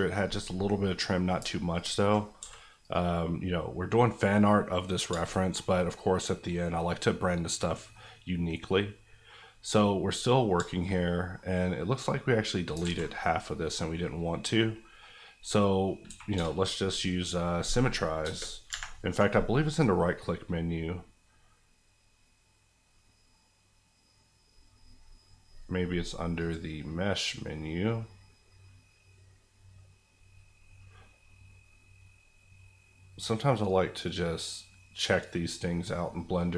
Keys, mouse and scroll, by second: 1.4-1.7 alt+scroll up 1, 1.7 alt+click, 2.4 x, 2.8 click, 3.2 scroll down 1, 3.5-6.2 middle drag, 9.4 scroll down 1, 9.7 middle click, 11.4 scroll up 1, 12.7 alt+scroll up 1, 12.8 alt+z, 13.6 middle click, 16.0 a, 16.3 space, 18.7 Escape, 19.1 right click, 26.3 click.